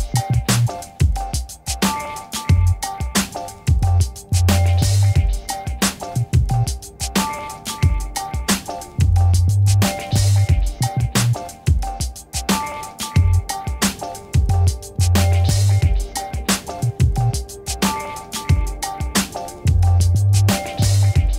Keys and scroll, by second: 0.5 ctrl++, 1.0 space, 9.7 l, 10.7 Return, 19.2 ctrl++, 20.3 a.